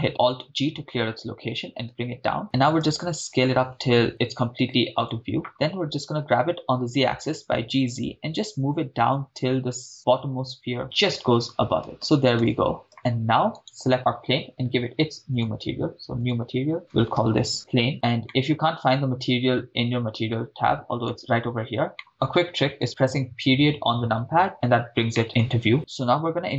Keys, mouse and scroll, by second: 0.5 alt+g, 2.8 s, 5.1 click, 5.6 g, 6.2 z, 11.0 shift+click, 11.9 shift+space, 12.1 shift+space, 12.4 shift+space, 13.0 shift+space, 13.6 drag, 13.6 right click, 15.3 click, 16.2-16.7 drag, 17.6 click, 17.9-18.2 scroll down 4, 18.3-21.1 middle drag, 21.9 middle click, 23.0 KP_Decimal, 24.7-25.1 scroll up 3, 25.1 middle drag.